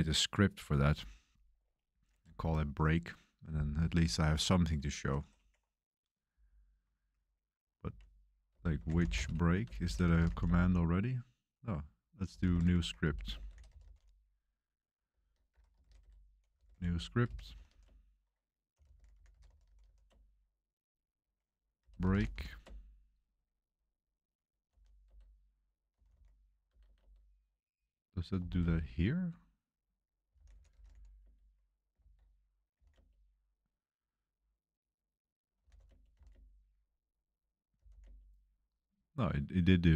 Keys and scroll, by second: 7.8-10.7 typing, 12.0-14.4 typing, 15.5 Escape, 15.7-20.3 typing, 21.5-22.8 typing, 24.4-28.9 typing, 30.0-33.2 typing, 31.9 ctrl+c, 34.9 Return, 34.9-38.2 typing.